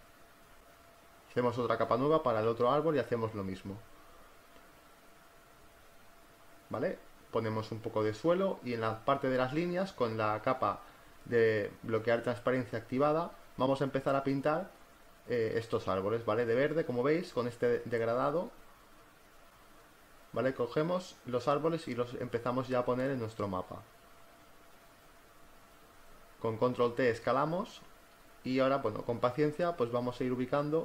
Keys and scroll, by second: 3.1 ], 3.7 [, 6.8 ], 27.7 ctrl+t, 29.2 Return, 30.1 ctrl+t.